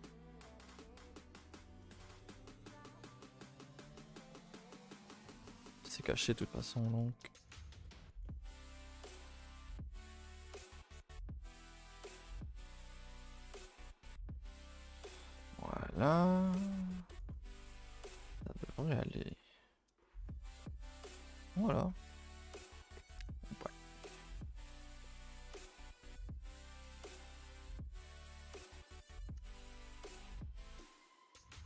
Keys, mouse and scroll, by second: 0.6 z, 1.5 z, 2.0 shift+middle click, 2.2 scroll up 1, 2.4 a, 2.6 a, 2.9 click, 3.3 shift+click, 3.7 shift+click, 4.4 shift+click, 4.5 shift+click, 5.6 right drag, 5.9-6.6 scroll down 6, 5.9 a, 6.1 a, 6.6 middle click, 7.5-7.8 scroll up 4, 7.8 middle click, 8.8-9.5 scroll up 1, 9.5 click, 10.1 shift+click, 10.5 shift+click, 11.2 shift+click, 11.6 shift+click, 12.3 shift+click, 12.5 shift+click, 13.4 right click, 13.5 a, 13.7 a, 13.7 scroll down 4, 14.0 middle click, 14.7 scroll down 1, 14.9-16.2 middle drag, 16.2 scroll down 1, 16.3-18.0 middle drag, 18.0 a, 19.3 u, 22.4 a, 23.0 n, 23.9-26.0 drag, 26.0 n, 26.8 Tab, 28.4 alt+h, 28.7 scroll down 2, 28.9 a, 29.0 a, 29.2-29.7 middle drag, 29.7 scroll down 2, 29.9-30.2 middle drag, 30.2 click.